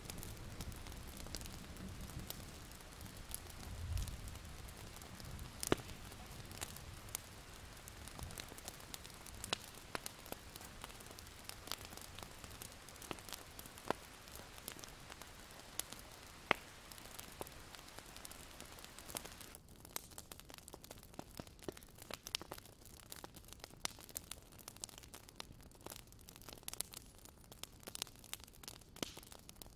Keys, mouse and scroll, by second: 1.2-1.9 alt+scroll down 1, 1.9 click, 2.0 alt+scroll down 1, 2.3 click, 2.5-3.5 scroll up 3, 3.5 click, 4.7 scroll down 1, 5.0 alt+scroll up 1, 6.9 click, 8.2 alt+scroll up 1, 8.4-9.8 alt+scroll down 2, 8.7 click, 9.8 click, 11.1-11.7 scroll down 1, 11.8 alt+scroll up 1, 12.1-12.5 scroll down 1, 12.5-13.3 scroll up 2, 13.3 click, 13.5-14.3 alt+scroll down 1, 14.3-15.7 drag, 16.1-16.5 alt+scroll up 1, 16.5 click, 16.7 alt+scroll down 1, 17.0 alt+scroll up 1, 17.9 click, 18.0 alt+scroll down 1, 18.2-19.4 alt+scroll up 1, 19.4-24.0 drag, 25.4 ctrl+z, 25.8 click, 27.9-28.5 alt+scroll up 2, 28.5 alt+scroll down 1, 28.7-29.2 alt+scroll up 1, 29.2 click.